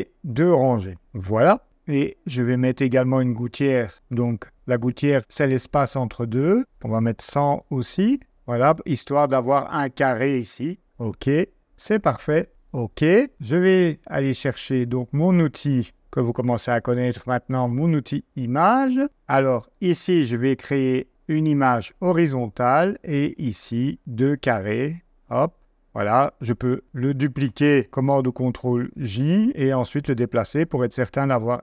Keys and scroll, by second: 1.0 2, 7.0-7.9 typing, 28.4 super+j.